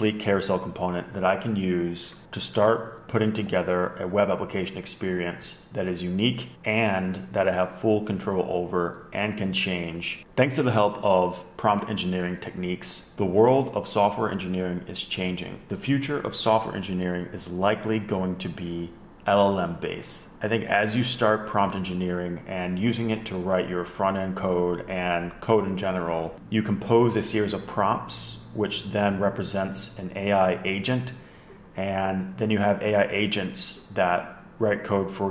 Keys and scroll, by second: 2.1 super+Tab, 13.1 Left, 13.1 Up.